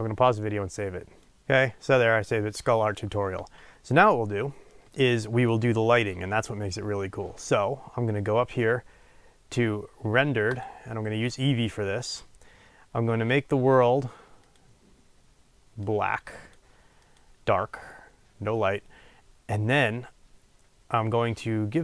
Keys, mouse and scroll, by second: 10.6 click.